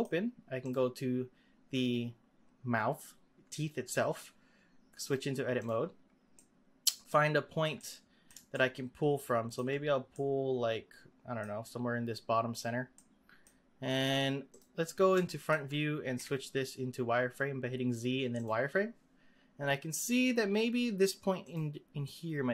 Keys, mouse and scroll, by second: 0.6 click, 5.0-6.4 drag, 6.4 middle click, 7.2-7.8 scroll up 3, 7.8-12.5 middle drag, 12.5 click, 12.9-14.5 middle drag, 14.5 click, 15.2 shift+middle click, 16.1 z, 19.3-20.2 scroll up 6, 21.4 click, 22.0 middle click.